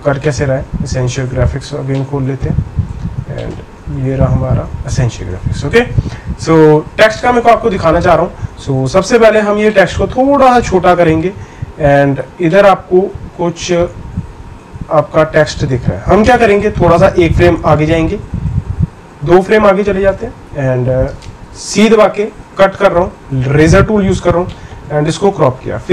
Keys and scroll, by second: 22.6 Right.